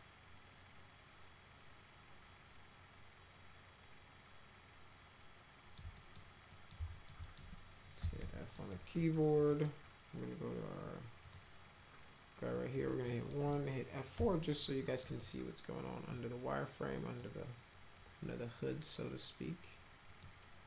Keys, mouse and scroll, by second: 6.0 middle click, 6.5 middle click, 6.9 alt+middle click, 7.3 middle click, 7.8-8.7 typing, 8.6 middle click, 9.0 middle click, 9.5 middle click, 11.2 click, 12.7 click, 13.3 middle click, 14.2 F4, 14.9 middle click, 16.1-17.2 drag, 20.2 middle click.